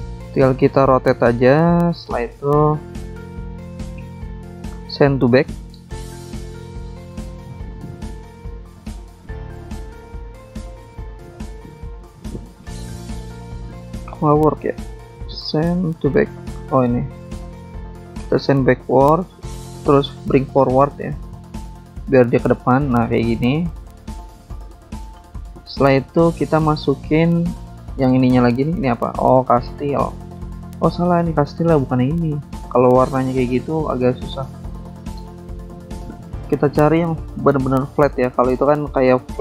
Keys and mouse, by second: 0.4 click, 1.5 click, 2.1 click, 2.2 double click, 3.7 double click, 3.7 double click, 4.3 click, 4.4 click, 5.1 shift+click, 5.9 click, 7.5 click, 8.9 click, 10.5 click, 11.5 click, 11.5 click, 12.1 click, 12.1 click, 14.5 click, 15.6 click, 17.0 click, 17.8 click, 18.5 click, 19.4 click, 21.6 click, 22.9 click, 23.7 click, 23.8 click, 25.2 click, 25.4 click, 25.7 click, 25.8 double click, 25.9 double click, 26.0 double click, 28.1 click, 28.2 click, 30.0 click, 32.3 click, 32.4 click, 34.0 alt+Tab, 35.0 click, 35.1 click, 35.5 click, 35.7 alt+Tab, 36.1 click, 37.2 click, 38.5 BackSpace, 38.7 alt+Tab.